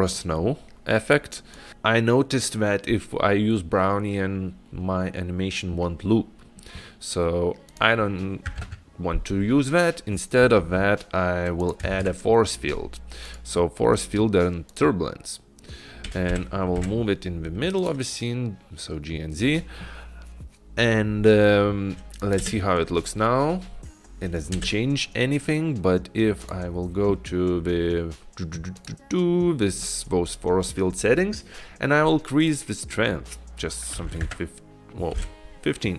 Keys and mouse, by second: 7.7-9.6 drag, 11.7 click, 12.1 shift+a, 16.4 g, 22.7 click, 22.7 space, 24.8 space, 26.5 click, 28.8 click, 29.0 click, 32.7-35.9 drag.